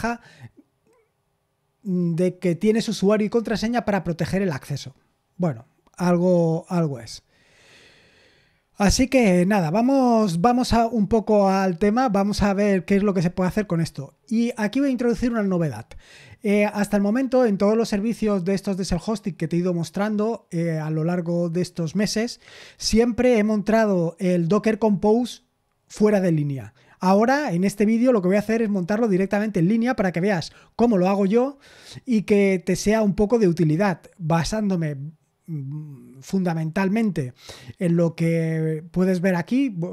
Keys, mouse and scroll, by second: 10.0-12.5 scroll down 1.